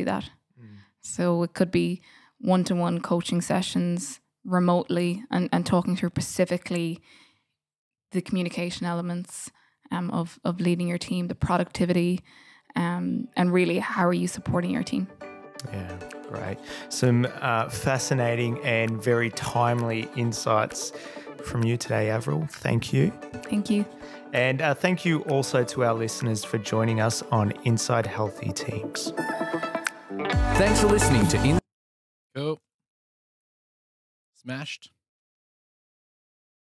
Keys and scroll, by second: 33.7 super+[, 36.0 super+F7.